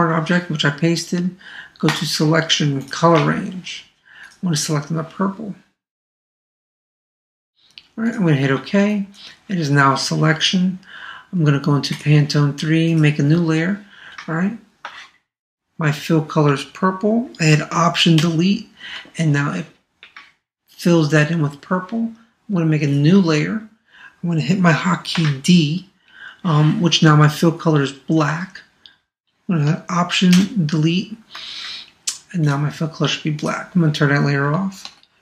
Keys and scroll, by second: 18.2 alt+BackSpace, 30.3 alt+BackSpace.